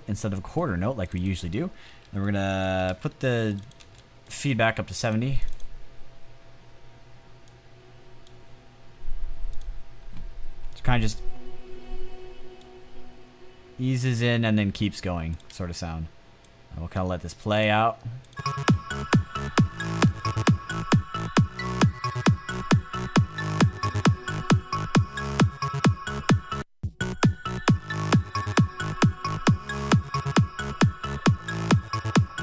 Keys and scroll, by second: 2.5-3.3 typing, 15.6 space.